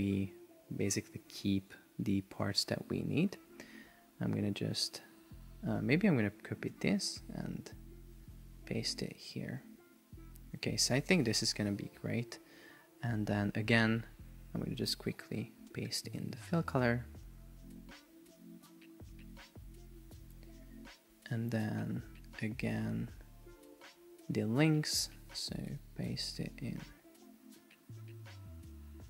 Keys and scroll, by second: 2.7 shift+Up, 6.8 super+c, 8.4 BackSpace, 9.7 super+v, 11.5 Left, 25.4 super+c.